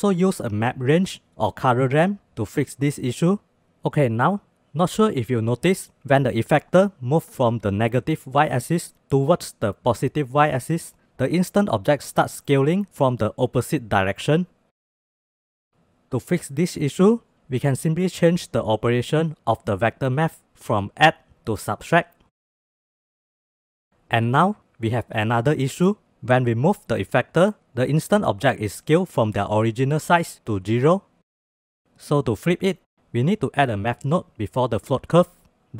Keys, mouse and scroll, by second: 4.1-15.7 drag, 17.7-18.0 middle drag, 18.4-19.5 drag, 20.0-21.2 drag, 22.7-28.9 drag, 32.1 click, 32.5 shift+a, 32.8 shift+a.